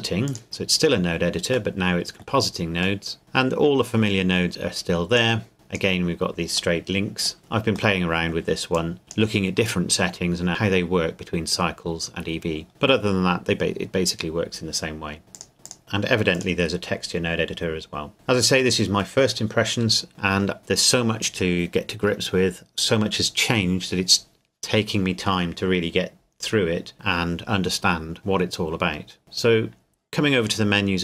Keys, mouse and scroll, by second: 0.2 click, 0.5 scroll down 1, 1.7 middle click, 3.2-4.4 scroll up 1, 4.6 click, 6.8 middle click, 7.4-8.0 scroll down 1, 8.0 middle click, 8.8 click, 12.7-15.2 scroll up 1, 15.3 click, 15.6 click, 15.8-16.2 scroll up 1, 16.3 click, 29.2 click.